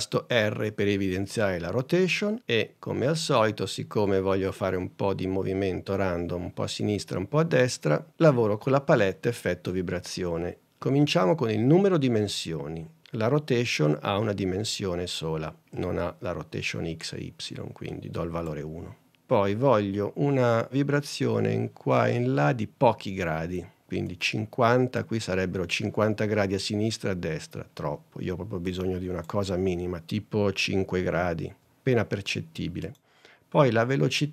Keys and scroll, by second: 31.6 5.